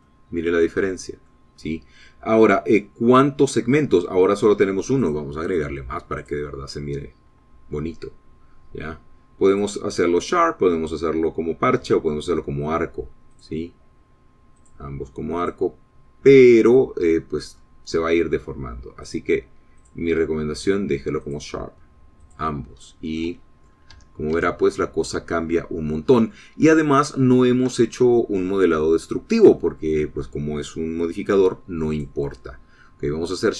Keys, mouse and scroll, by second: 0.1 KP_Enter, 1.3-2.7 middle drag, 6.2 click, 6.7 click, 7.4 click, 10.7 click, 14.5 click, 15.8 click, 16.6 click, 17.6-19.0 middle drag, 20.3 click, 21.0 click, 22.5 click, 23.5 click, 24.1 middle click, 25.3 Tab, 25.9 scroll down 1, 26.3-27.7 middle drag, 27.7-28.4 scroll up 1, 28.4 shift+middle click, 33.2 right click.